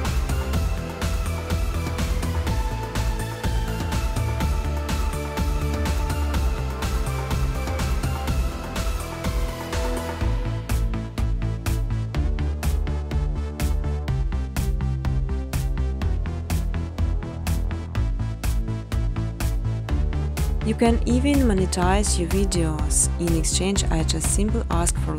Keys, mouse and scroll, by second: 0.0-2.5 typing, 3.7-6.3 typing, 4.0 click, 8.1 Tab, 8.2-11.2 typing, 12.5 Return, 16.6 click, 19.1 click, 20.7 click, 21.9 click, 22.9 click, 23.5 7, 24.4 Tab.